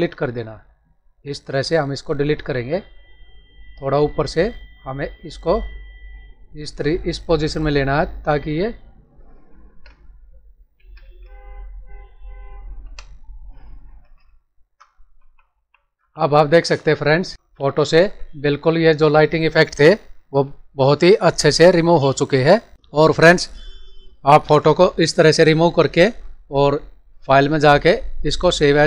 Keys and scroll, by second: 2.3 ctrl+d, 9.6 ctrl+Return, 10.7 alt+s, 10.9 alt+f, 12.7 Delete, 13.8 ctrl+d, 15.1 ctrl+-, 17.3 ctrl+-, 17.5 ctrl+=.